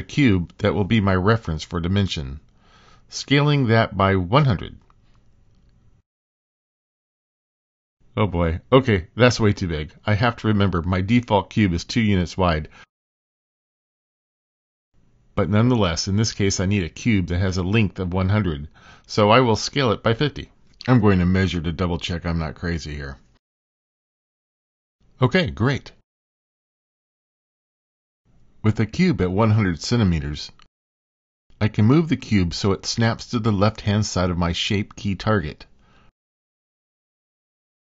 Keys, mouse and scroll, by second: 4.7 middle click, 6.2 s, 14.9 super+z, 16.4 s, 22.0 click, 23.1-25.0 drag, 25.1 Escape, 27.2 click, 29.1 click, 30.6 click, 31.5 middle click, 36.7 g.